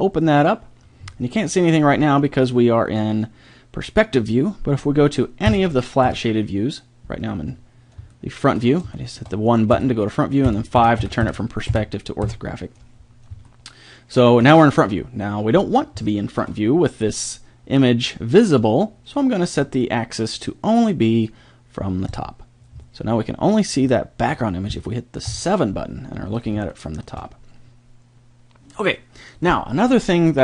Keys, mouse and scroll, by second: 0.0 click, 0.2 click, 1.5-3.2 middle drag, 5.5 KP_1, 6.3 KP_5, 9.7-12.2 typing, 13.5 middle drag, 13.7 middle click, 13.9 middle click, 25.3 KP_7.